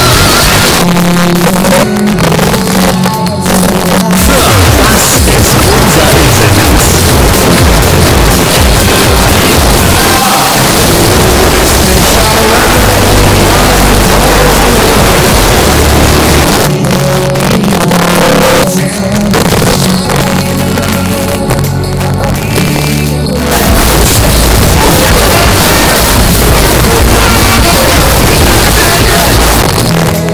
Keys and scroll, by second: 0.6 Page_Down, 16.5 Page_Down, 29.6 Page_Down.